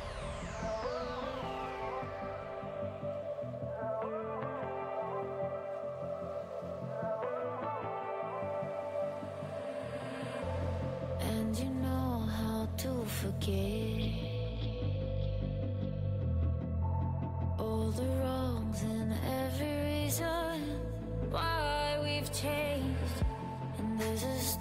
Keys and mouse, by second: 0.5-1.7 right drag, 0.9 f, 1.2 f, 1.7 f, 3.1 ctrl+z, 5.4-6.6 drag, 6.6-10.5 right drag, 9.2 v, 12.4-18.7 drag, 13.3 f, 16.1 g, 17.8 g, 19.2 g, 20.7 g, 23.4 f, 23.5 f.